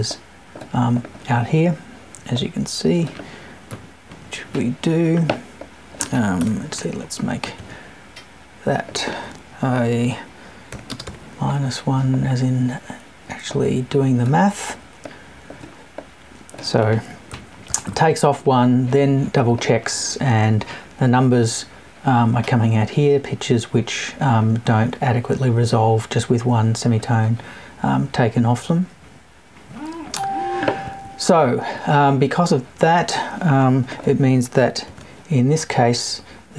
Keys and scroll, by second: 3.7 Left, 6.4 BackSpace, 17.3 Right.